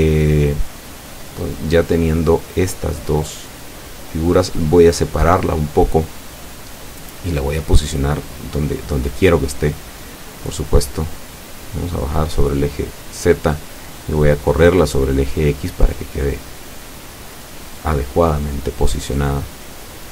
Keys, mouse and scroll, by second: 0.0 shift+KP_Enter, 4.4-6.1 typing, 6.7 KP_Enter, 8.6-9.6 middle drag, 10.7-13.8 drag, 14.5-17.4 drag, 17.4-19.9 middle drag.